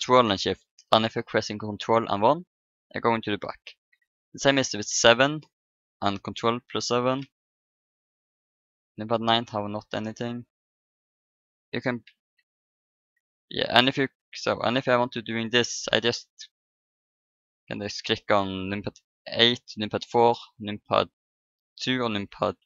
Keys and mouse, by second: 0.8 ctrl+KP_1, 3.9 KP_7, 5.5 ctrl+KP_7, 7.7 ctrl+KP_9, 8.4-11.3 typing, 12.3 ctrl+KP_8, 13.1 ctrl+KP_2, 14.2-17.6 typing, 19.6-22.6 typing.